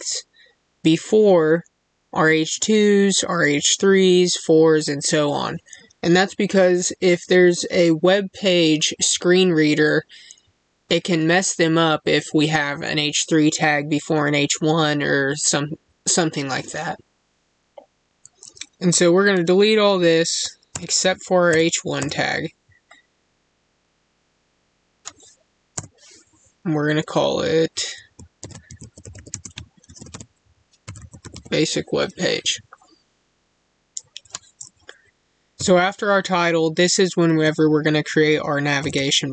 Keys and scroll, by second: 29.2 space.